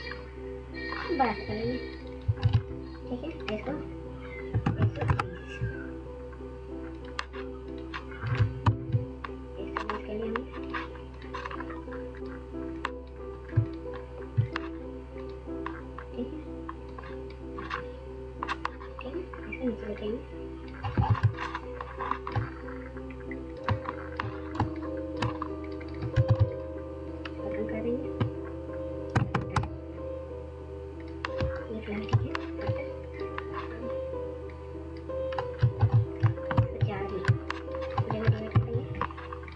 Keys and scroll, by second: 2.1 ctrl+a, 4.1-4.7 typing, 8.3 ctrl+0, 25.3 ctrl+a, 28.1-28.5 typing, 31.1 ctrl+space, 31.5 ctrl+space, 31.5 ctrl+space, 31.6 ctrl+space, 35.5 ctrl+alt+0, 37.5 ctrl+0.